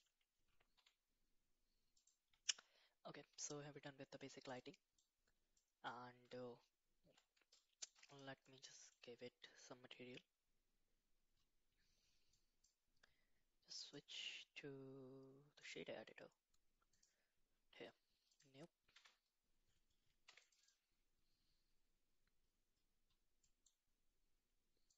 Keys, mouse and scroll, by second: 0.5 g, 5.6-6.0 middle drag, 12.3 click, 13.9-15.7 drag, 16.9 click, 18.3 click, 19.4 Tab, 20.2 3, 20.4 click.